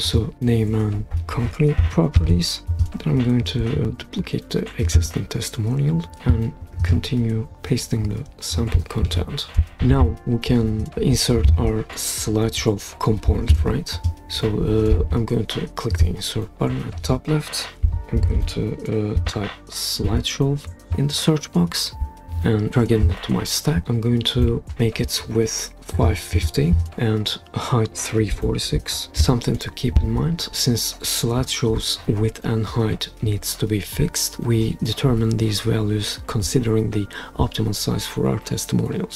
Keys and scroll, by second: 2.2 super+v, 9.0 super+c, 17.6-20.6 typing, 26.9 typing, 28.1-29.4 typing.